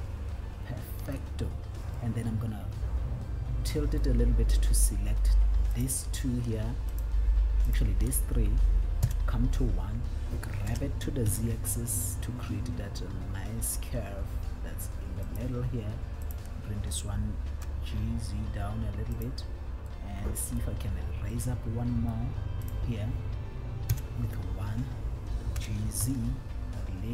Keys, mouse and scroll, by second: 0.1 click, 4.5 middle click, 5.9 scroll up 1, 7.2 shift+click, 8.0 shift+click, 9.4 KP_1, 10.9 g, 11.6 z, 15.7 click, 16.4 click, 17.9 g, 19.6 click, 20.2 middle click, 21.7 middle click, 23.0 click, 24.3 KP_1, 25.8 g, 26.4 z.